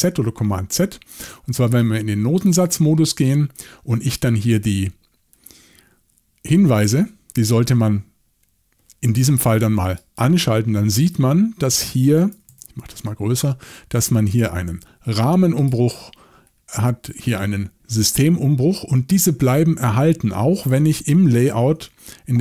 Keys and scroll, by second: 12.3 typing, 21.6 shift+super+l.